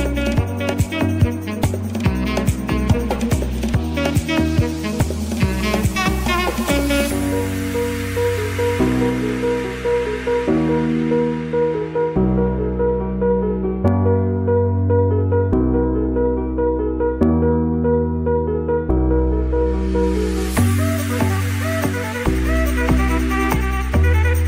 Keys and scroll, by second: 2.2 ctrl+z, 4.7 ctrl+z, 11.1 [, 11.7 ctrl+z, 16.1 ], 17.4 ctrl+z, 19.3-22.5 typing, 22.3 Right.